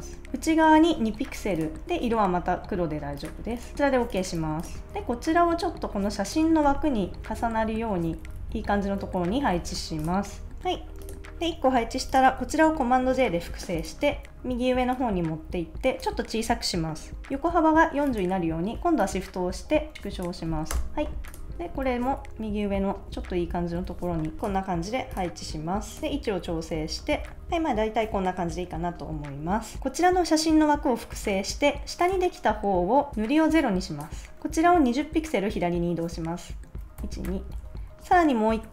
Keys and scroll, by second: 1.1 2, 4.4 super+s, 6.8 Right, 7.5 shift+Up, 8.0 Down, 8.8 Left, 9.0 Up, 9.2 Right, 13.0 super+j, 20.7 Return, 21.9 shift+Right, 22.2 shift+Up, 22.7 Left, 23.0 Up, 23.8 Left, 26.0 Left, 26.1 Up, 26.4 Right, 26.7 Down, 27.1 Left, 27.3 Up, 31.2 super+j, 37.0 shift+Left.